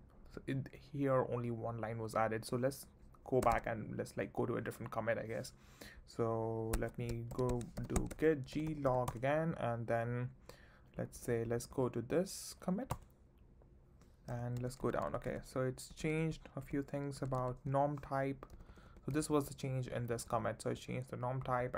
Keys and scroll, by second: 3.4 space, 3.5 x, 6.7 Escape, 7.3-9.4 typing, 10.9 j, 12.9 Return, 14.6 ctrl+d, 18.5 j, 19.1 k, 20.7 j.